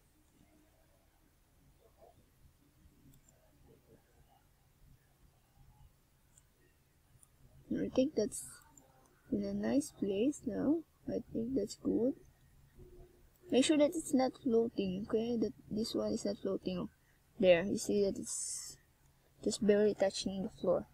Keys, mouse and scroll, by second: 1.1 w, 3.7 middle click, 5.3 KP_1, 6.1 Tab, 8.2-8.7 scroll up 4, 9.0 click, 10.5 click, 11.2 click, 12.8 middle click, 14.9 scroll up 2, 19.3 Tab, 20.0 a, 20.4 a.